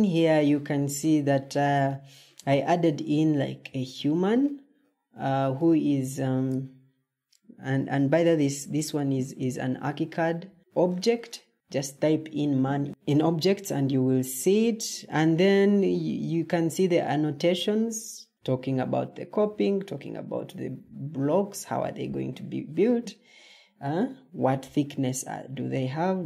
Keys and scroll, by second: 10.4 Escape.